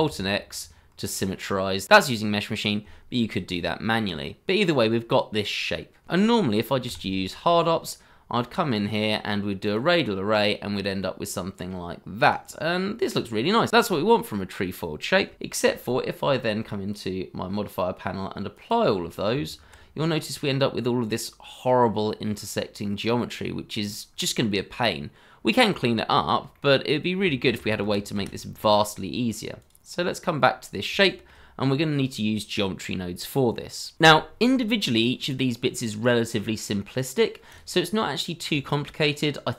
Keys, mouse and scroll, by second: 0.0 alt+x, 3.4 Tab, 5.5 scroll up 1, 6.8 q, 12.4 scroll down 1, 13.5 scroll up 1, 19.3 Tab, 20.0 scroll up 1, 20.8 middle click, 23.8 scroll up 1, 24.2 middle click, 26.0 scroll down 1, 26.5 middle click, 27.4 ctrl+z, 30.2 scroll up 1, 31.0 shift+middle click, 35.0 scroll down 1, 35.4 shift+middle click.